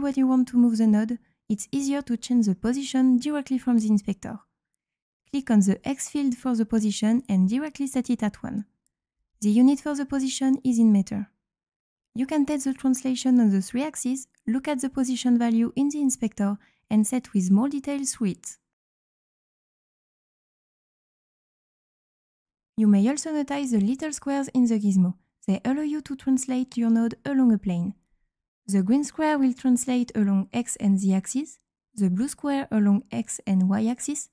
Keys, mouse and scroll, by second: 5.3 click, 12.3-12.7 drag, 13.2-13.9 drag, 14.3-15.3 drag, 15.6-16.3 drag, 16.9-17.7 drag, 18.3 click, 18.9 click, 19.8 click, 20.8-22.2 drag, 27.6-28.6 right drag, 28.0 q, 29.3-31.2 drag, 31.8-33.7 drag.